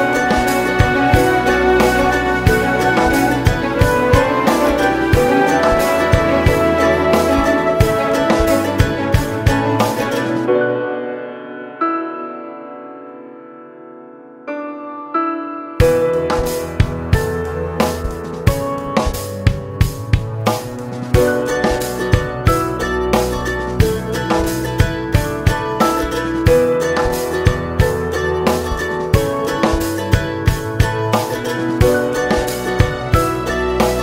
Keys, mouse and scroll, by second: 0.3 KP_Decimal, 0.9 shift+click, 1.2 scroll down 1, 1.5 shift+click, 2.9 alt+a, 3.1 scroll down 1, 3.4 scroll up 1, 4.5 click, 7.5 alt+a, 7.7 scroll down 1, 8.1 click, 8.4 scroll up 1, 8.7 shift+click, 10.0 `, 10.5 click, 10.8 KP_Decimal, 11.1 Tab, 12.5 Tab, 14.1 u, 14.4 Tab, 15.3 `, 16.1 click, 16.2 Tab, 17.3 u, 17.7 Tab, 17.8 click, 17.9 Tab, 19.5 Tab, 19.7 scroll down 1, 20.1 click, 22.7 Tab, 23.1 a, 23.1 scroll down 2, 23.2 `, 23.7 KP_0, 24.0 scroll up 1, 24.4 scroll down 1, 26.1 click, 28.3-33.4 drag, 30.9 alt+a, 31.5 scroll up 2, 31.8 scroll down 1, 33.5 click.